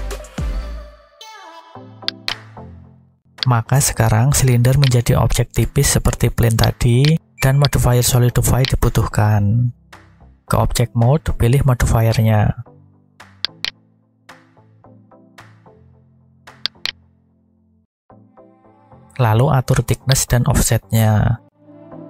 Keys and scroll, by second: 2.9 a, 5.5 Tab, 9.0 Tab.